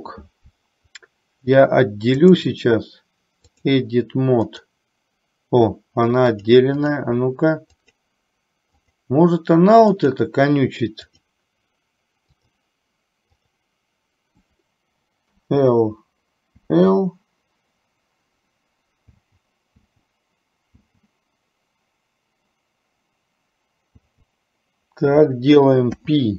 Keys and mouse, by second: 2.4-4.0 drag, 4.5 click, 6.5 click, 7.9 click, 8.9 click, 10.1 click, 11.2-12.9 drag, 13.5 click.